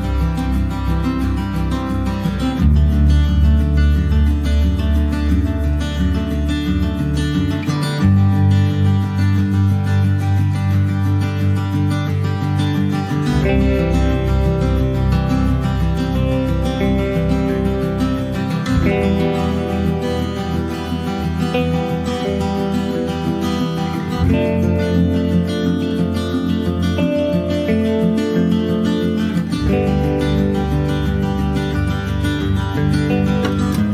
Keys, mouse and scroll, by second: 0.1 shift+middle click, 0.7 shift+d, 1.3-1.7 scroll down 1, 1.7 click, 3.2-5.5 middle drag, 5.5 click, 7.4 middle click, 7.6 scroll down 1, 7.9 shift+d, 8.7 click, 9.5-10.7 shift+middle drag, 10.7 click, 12.3 middle click, 13.1 shift+d, 14.2 click, 14.8 shift+middle click, 15.2 scroll up 1, 15.4 shift+middle click, 16.0 click, 17.8 scroll down 1, 17.9 middle click, 18.1 scroll up 1, 18.2 shift+middle click, 18.6 click, 19.6 scroll down 2, 19.8 middle click, 20.0 scroll up 2, 20.3 shift+middle click, 21.1 click, 21.3 middle click, 21.9-23.6 drag, 24.5 shift+middle click, 25.4-26.1 scroll up 1, 26.1 click, 26.3-30.3 middle drag, 30.3 click, 30.7 middle click, 31.4 click, 32.0 ctrl+s, 32.4 click, 32.5 middle click, 33.5 right click.